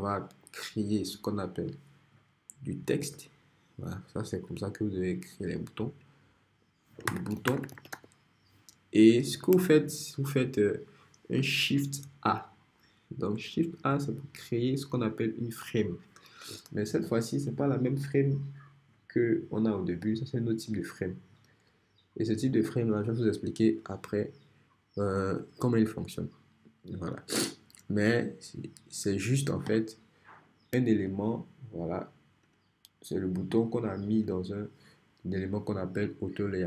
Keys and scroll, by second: 3.0 t, 6.8-8.4 typing, 14.2 shift+a.